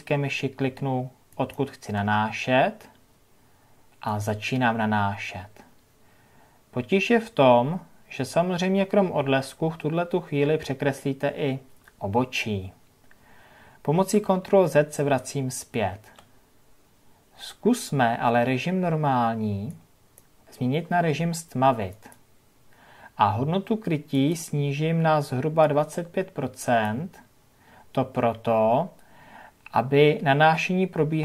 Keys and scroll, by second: 15.6 ctrl+z.